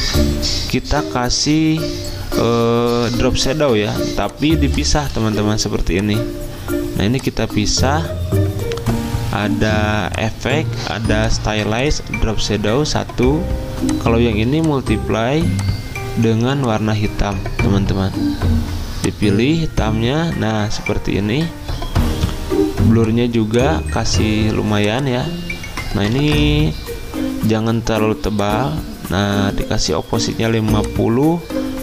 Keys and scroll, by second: 5.2 ctrl+z, 9.6 ctrl+z, 26.1 typing, 31.6-31.8 typing.